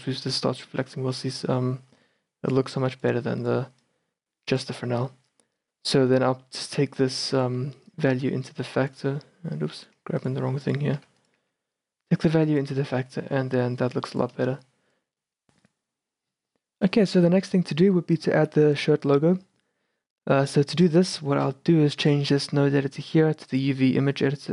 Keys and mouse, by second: 0.2-1.4 middle drag, 1.4-5.0 drag, 5.0-9.9 middle drag, 9.9-14.3 drag, 11.1 g, 11.5 a, 13.5 shift+b, 14.6 shift+b, 20.8-22.1 middle drag, 23.7 click.